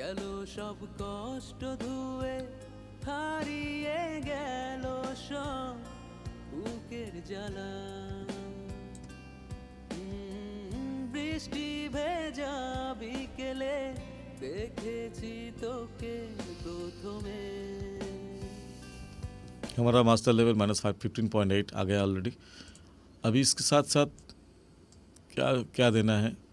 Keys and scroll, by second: 19.9 space.